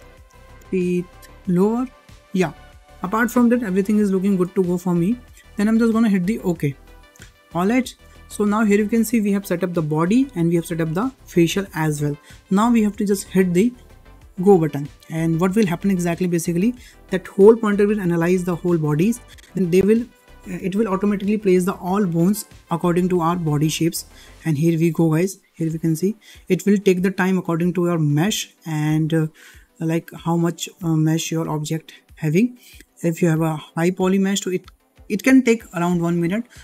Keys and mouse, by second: 4.6 shift+middle click, 6.6 click, 8.1 shift+middle click, 15.7-32.6 drag.